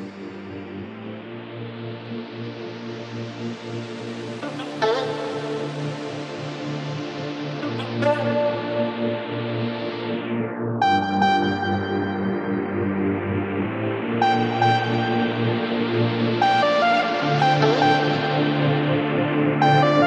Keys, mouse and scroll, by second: 0.6-1.7 drag, 2.4-3.7 drag, 3.7 g, 10.3 click, 10.7 ctrl+s, 11.9-12.5 shift+middle drag, 12.5-13.0 scroll up 1, 13.0 click, 14.0-15.3 drag, 16.2-17.9 right drag, 17.9 click, 18.8-20.0 right drag.